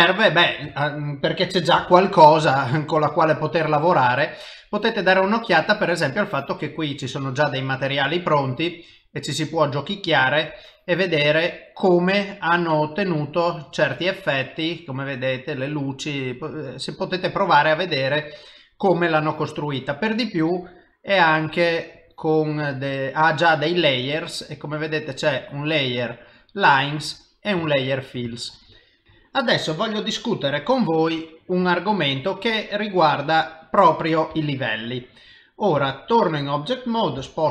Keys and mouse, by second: 0.3 ctrl+middle click, 0.7 shift+middle click, 1.7 s, 1.8 s, 2.5 shift+middle click, 3.1 middle click, 3.7 middle click, 3.9 shift+middle click, 5.5 s, 6.1 click, 7.9 click, 9.9 middle click, 11.5 click, 13.0 click, 17.2 middle click, 22.0 click, 22.9 click, 24.7 click, 25.5 click, 26.4 click, 27.0 click, 27.8 ctrl+middle click, 28.3 shift+middle click, 31.6 s, 34.3 g, 36.1 click, 37.2 g.